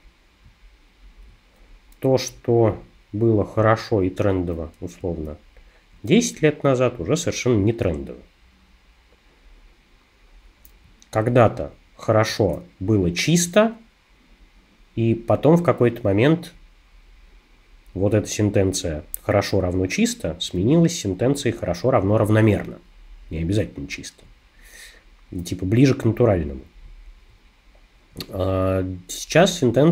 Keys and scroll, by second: 5.0 space.